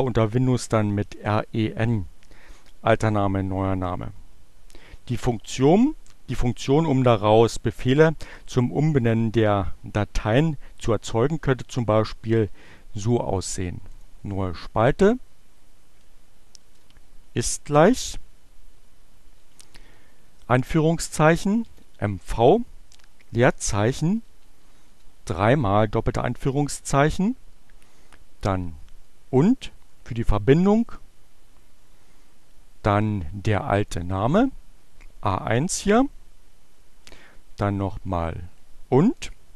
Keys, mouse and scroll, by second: 13.9 click, 14.4 click, 15.6 shift+0, 18.1 shift+2, 20.6 m, 21.9 v, 23.1 space, 24.3 shift+2, 28.3 shift+6, 33.3-34.5 drag, 36.1 shift+6, 38.9 shift+2.